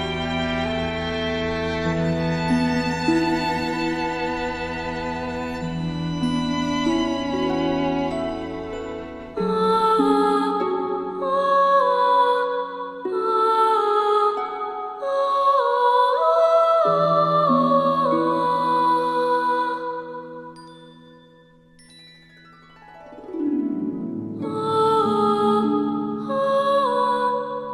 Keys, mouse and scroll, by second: 0.0 ctrl+shift+], 0.5 space, 0.6 click, 2.5 alt+scroll up 1, 3.3-4.0 click, 4.5 alt+scroll up 1, 5.5 click, 6.0 alt+scroll down 1, 6.4 space, 6.5 click, 7.6 alt+scroll down 1, 7.7 space, 7.8 click, 7.8 space, 8.1 drag, 8.3-8.6 space, 8.8 click, 9.2 right click, 9.3 click, 10.7-11.2 alt+shift+click, 11.0 space, 11.2-11.5 click, 11.9 alt+scroll up 1, 12.3 click, 12.6-13.6 typing, 12.7 click, 13.0 click, 13.2 click, 13.4 click, 13.5 alt+scroll down 1, 13.6-14.7 click, 15.2 space, 15.2 click, 15.3 alt+scroll up 1, 15.8 space, 15.9-16.2 click, 16.2 space, 16.2 click, 16.3 space, 16.7 alt+scroll up 1, 18.4 click, 18.4-18.8 scroll up 1, 19.0 alt+scroll up 1, 20.3 click, 22.6-23.4 drag, 25.4 space, 25.9 click, 26.0 space, 27.3 click.